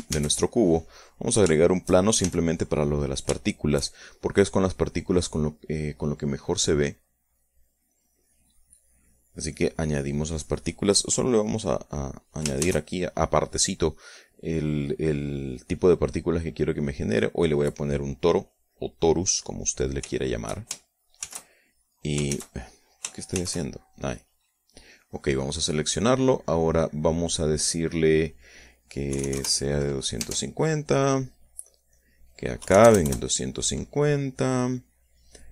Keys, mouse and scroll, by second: 0.5 shift+a, 1.2 click, 2.0 shift+middle click, 2.6 shift+s, 3.4 shift+click, 3.8 shift+middle click, 5.4-6.4 drag, 7.3 middle click, 8.3 click, 9.2 click, 10.0 click, 11.0 click, 12.3 click, 13.0 shift+a, 17.0 click, 19.7 click, 20.6 shift+middle click, 21.6 shift+z, 22.7 shift+z, 23.8 shift+c, 24.8 click, 28.7 click, 29.6 KP_2, 29.8 KP_0, 30.6 Tab, 32.1 click, 33.0 KP_2, 33.2 KP_5, 33.3 KP_0, 33.5 KP_Enter.